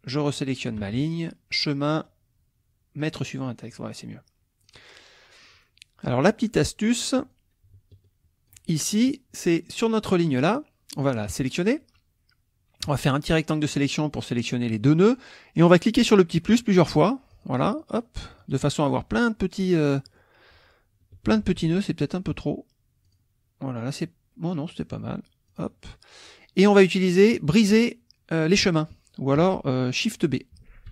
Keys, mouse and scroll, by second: 0.6 shift+click, 1.5 click, 3.0 click, 3.7 middle click, 4.6 click, 6.1 click, 7.3-8.7 drag, 8.7 ctrl+middle click, 9.9 click, 10.9 click, 12.9 click, 16.5 click, 17.0 click, 18.4 click, 19.6 middle click, 20.0 middle click, 21.4 ctrl+z, 23.0 click, 25.5 click, 30.7 shift+b.